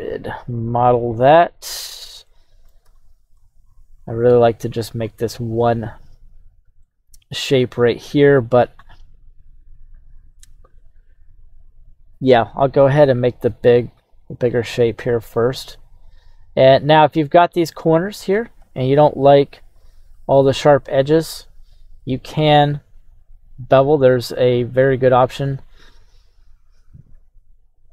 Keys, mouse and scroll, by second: 1.7 scroll up 1, 2.2-3.3 shift+middle drag, 6.8-27.9 shift+middle drag, 7.8-9.8 scroll.